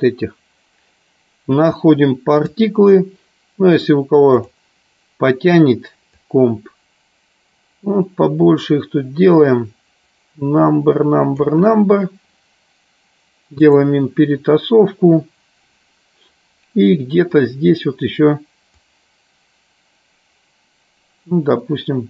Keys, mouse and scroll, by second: 4.7 click, 6.4-12.0 drag, 13.7 click, 19.1-22.0 drag.